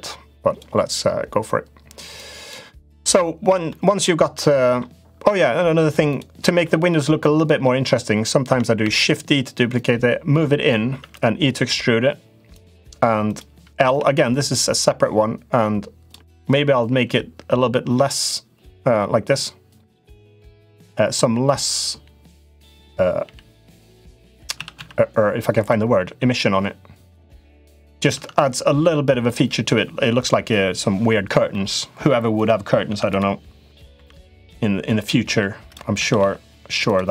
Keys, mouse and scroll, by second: 1.9 click, 2.8 middle click, 3.6 middle click, 4.3 middle click, 6.4 middle click, 8.6 shift+d, 9.5 click, 10.7 e, 13.1 click, 13.6 l, 14.3-15.9 drag, 16.8 g, 23.0 g, 24.3 s, 26.2-27.6 drag, 27.9 Tab, 31.2 middle click, 32.1 click, 32.6 Tab, 32.8 click, 33.7 l, 34.2-35.5 drag, 35.7 s.